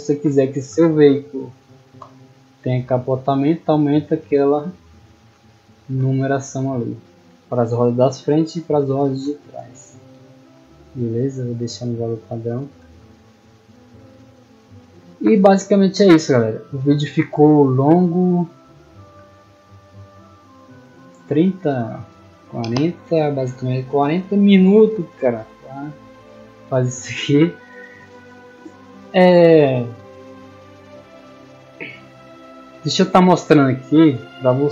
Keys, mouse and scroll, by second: 1.9-2.8 typing, 4.2 a, 13.2 middle click, 13.6 scroll down 2, 14.1 middle click, 18.0 click, 20.7 click, 25.9-27.8 scroll up 4, 29.1-30.6 middle drag, 30.8-31.3 scroll up 2, 31.6-32.0 middle drag, 32.8 right click, 33.2-33.5 scroll down 2, 33.7-34.2 middle drag, 34.6-34.7 middle drag.